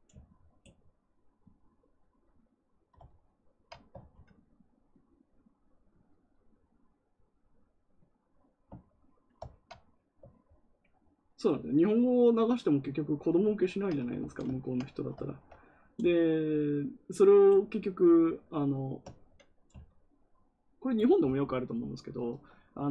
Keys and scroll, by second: 14.1 ctrl+z.